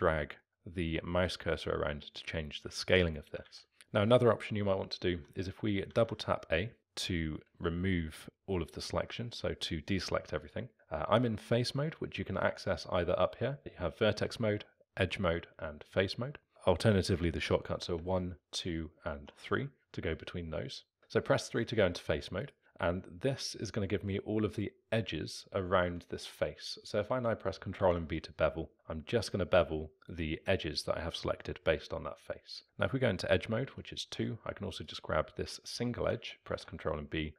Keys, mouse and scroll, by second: 3.4 ctrl+z, 5.1 a, 5.9 a, 6.0 a, 10.4 click, 18.0 1, 18.4 2, 19.1 3, 22.4-25.2 drag, 27.7 ctrl+b, 33.7 2, 34.8 click, 36.4 ctrl+b.